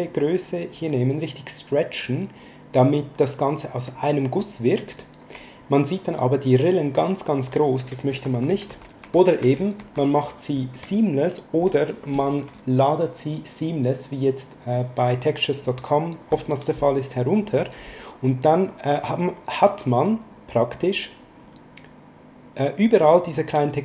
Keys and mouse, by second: 2.0 click, 6.3 click, 8.1 ctrl+z, 19.1 click.